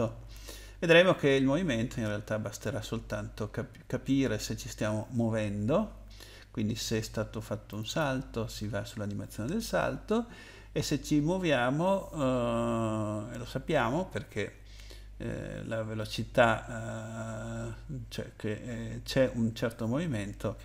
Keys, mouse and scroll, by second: 3.2-4.3 scroll down 3, 6.6-7.6 scroll up 1, 7.7 click, 7.9 click, 9.7-10.9 scroll up 2, 12.1-12.9 scroll up 2, 13.2-13.6 scroll down 2, 14.2-14.6 scroll down 1.